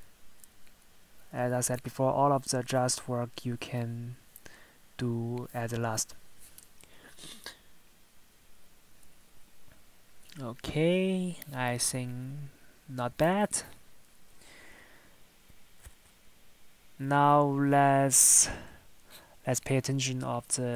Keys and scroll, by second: 5.4 Tab, 13.4 Tab, 18.6 Tab.